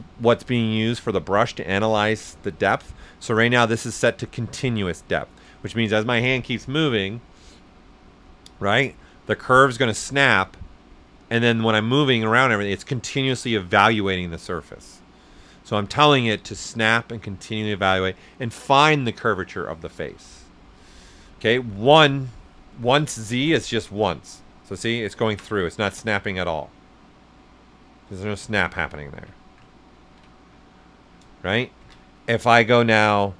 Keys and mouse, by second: 22.0 click, 22.9 right click, 23.7 click, 24.5 right click, 25.7-29.3 right drag, 31.1 right click, 31.8 ctrl+z, 32.9 click.